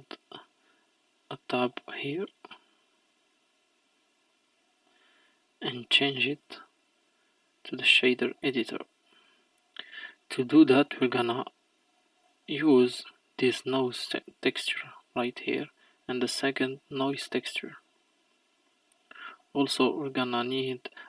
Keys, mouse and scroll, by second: 2.7-21.0 drag.